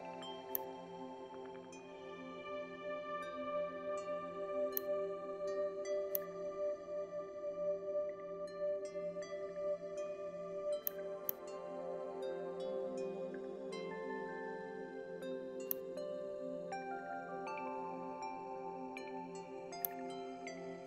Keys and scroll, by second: 16.3 ctrl+z, 18.7 ctrl+r.